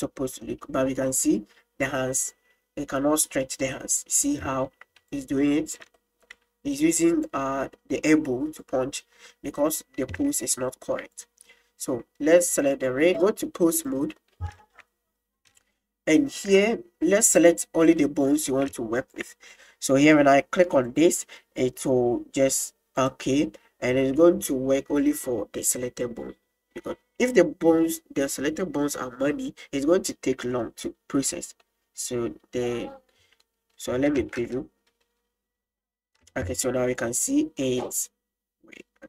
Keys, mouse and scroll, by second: 0.5 middle click, 6.0 shift+middle click, 6.8 click, 8.7 click, 10.3 shift+middle drag, 12.7 right click, 13.2-14.0 drag, 14.2 middle click, 14.6 shift+middle click, 15.6-15.9 shift+middle drag, 16.2 shift+middle drag, 17.4 right drag, 18.0-18.5 middle drag, 19.0 shift+right click, 20.9-28.3 drag, 33.8 middle drag, 34.3 space, 37.0 click.